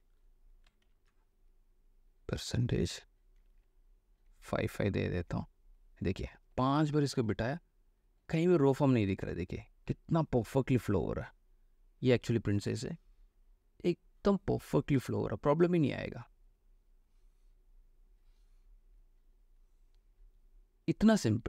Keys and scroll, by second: 1.0 ctrl+alt+c, 4.4 5, 6.8 space.